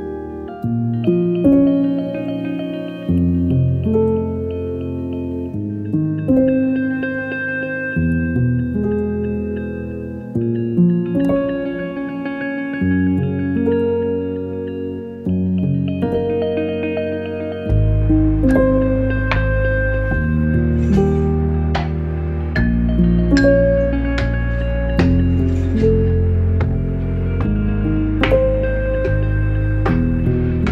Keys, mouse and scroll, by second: 15.5 click, 19.5 click, 20.2 ctrl+j, 20.5 ctrl+click, 20.8 ctrl+e, 21.7 space, 21.9 click, 22.1 space, 23.1 click, 27.5 click.